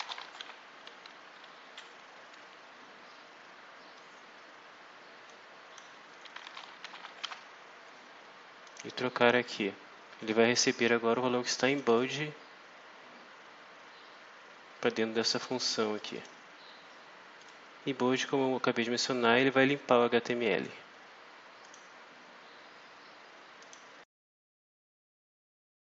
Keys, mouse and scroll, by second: 0.0-0.8 typing, 1.1 Down, 1.6 Left, 2.2 -, 5.2 click, 6.2-7.7 typing, 8.6 click, 9.1 click, 11.6 click, 15.4 click, 15.9 click, 17.3 click, 19.0-20.8 drag, 21.6 click, 23.5 click.